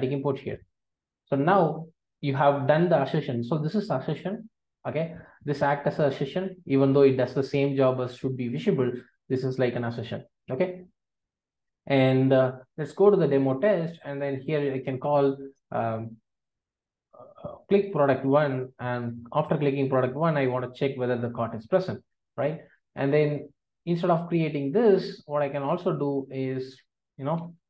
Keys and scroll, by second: 1.0 ctrl+alt+o, 14.8 alt+shift+space, 19.1 Return, 20.4 Return, 27.4 super+x.